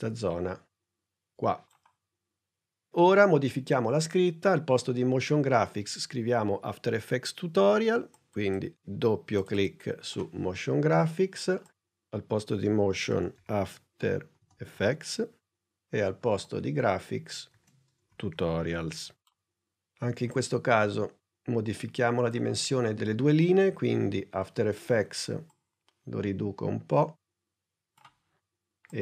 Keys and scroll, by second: 13.1-15.2 typing, 17.4 shift+t, 18.1 shift+u.